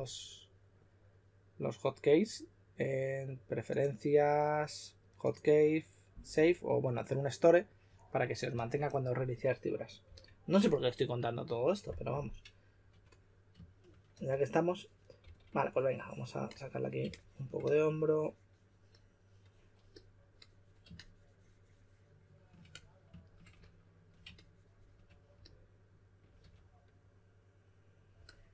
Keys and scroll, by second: 10.0 typing, 12.9 typing, 14.1 typing, 15.2 typing, 26.4 typing.